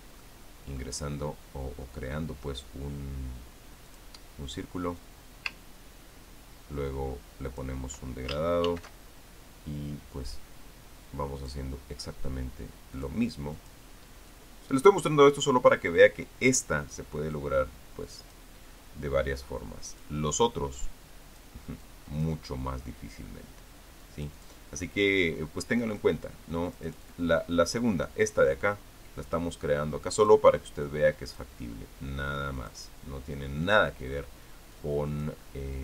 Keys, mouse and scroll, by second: 1.0 ctrl+middle click, 4.6 click, 5.8-8.8 drag, 9.5 ctrl+shift+f, 12.2 click, 13.8 click, 14.4 click, 15.1 click, 18.9 click, 20.7 click, 21.3-22.4 drag, 22.6 click, 24.8 click, 26.7 click, 27.5 click, 30.9 click, 31.6 click, 33.4 click, 35.5 click.